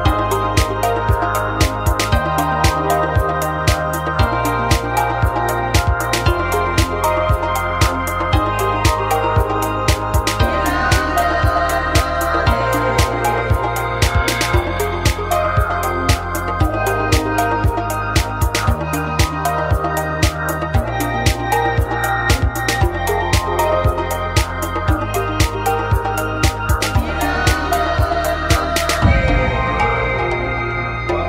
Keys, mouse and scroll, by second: 3.4 middle click, 5.4 a, 6.6-8.1 drag, 8.1 x, 9.4-10.9 drag, 10.7 x, 11.6 middle click, 12.0 middle click, 15.6 f, 15.8 a, 16.7 f, 16.8 a, 17.9 click, 18.5 f, 18.8 a, 19.6 f, 19.7 a, 20.1 click, 20.8 f, 20.8 a, 21.0 click, 21.5 f, 21.8 a, 22.2-24.3 right drag, 23.0 f, 23.1 a, 24.3 right click, 24.9 f, 25.0 a, 28.3 x, 30.9 a.